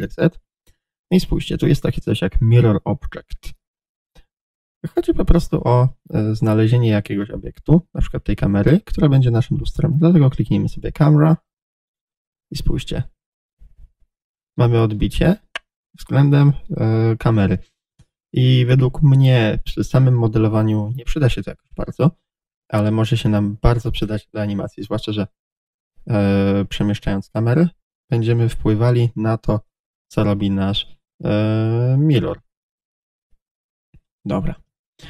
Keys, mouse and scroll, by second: 9.9-13.2 drag, 11.8-13.2 scroll down 1, 13.2-23.7 middle drag, 23.0 Tab, 23.7 click, 24.9 g, 29.8 click, 30.2 r, 34.2 click, 34.5 Return.